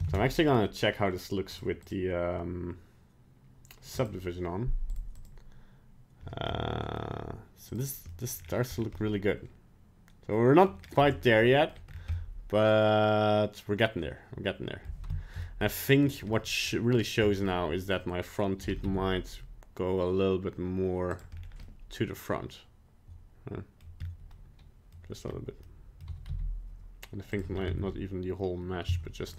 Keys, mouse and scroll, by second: 0.1 ctrl+Tab, 0.5 right click, 1.5 click, 1.8 click, 4.1 click, 4.9 click, 5.3 click, 6.5 middle click, 7.7 click, 8.1 middle click, 8.4-8.9 scroll down 5, 8.9 middle click, 10.9 scroll up 2, 11.1 middle click, 11.9 scroll up 2, 12.1 middle click, 14.8 middle click, 15.1 shift+middle click, 15.6 middle click, 16.0 right click, 16.3 middle click, 16.9 right click, 17.2 scroll up 2, 17.4 middle click, 18.6 g, 21.3 scroll down 2, 21.6 middle click, 24.0-24.3 scroll up 2, 24.5 middle click, 24.8 middle click, 25.3-25.7 scroll up 1, 25.7 middle click, 26.0 g, 27.5 scroll up 2, 27.7 Tab, 28.8 z.